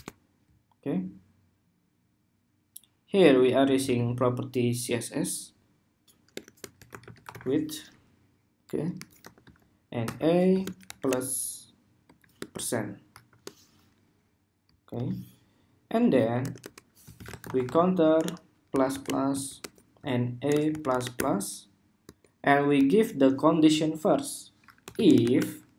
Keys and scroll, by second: 14.6 super+s.